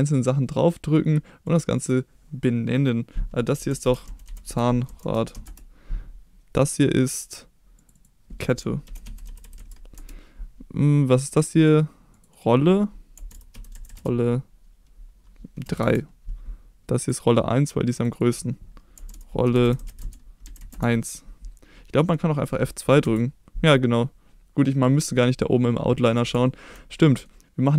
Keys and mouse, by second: 1.8-5.9 drag, 6.5 click, 7.9-10.3 drag, 9.4 t, 11.2 click, 12.3-16.4 drag, 13.9 l, 17.0 click, 18.1-21.4 drag, 19.8 l, 23.0 F2, 26.5 shift+middle drag, 27.0 middle drag.